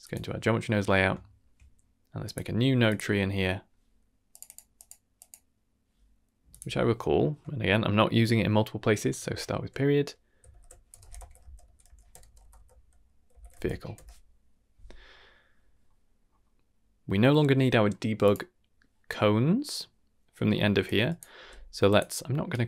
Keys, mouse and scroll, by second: 0.0 click, 0.8 middle drag, 1.2 shift+middle drag, 2.2 click, 2.8-4.3 drag, 4.4 click, 4.7 click, 5.1 click, 6.4-13.9 drag, 12.2 BackSpace, 12.3 BackSpace, 15.4 middle click, 15.8 middle click, 16.2-16.6 scroll up 3, 18.1 click, 19.2-19.7 scroll down 3, 19.5 middle click, 20.0 middle click, 20.4-20.8 scroll up 2, 20.8-21.1 drag, 21.3 g, 22.4 ctrl+right click.